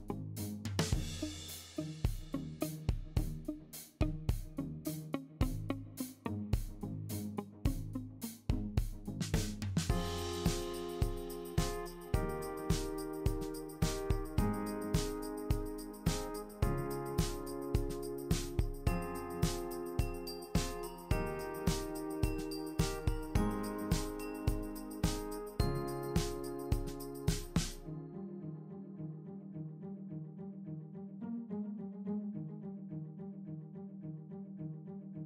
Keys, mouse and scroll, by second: 11.9 click, 15.0 shift+click, 15.3 shift+click, 16.0 l, 18.2 super+l, 23.9 click, 24.6 shift+click, 26.8 click, 28.1 shift+click, 28.9 super+l.